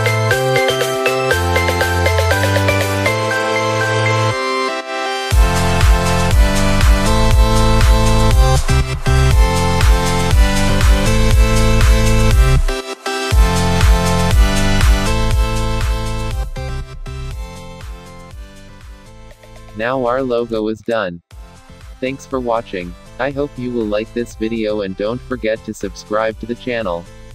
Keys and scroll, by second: 11.1 ctrl+0.